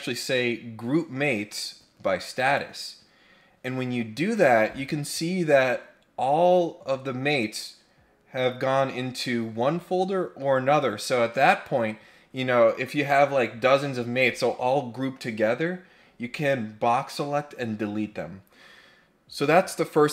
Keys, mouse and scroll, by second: 2.4 click.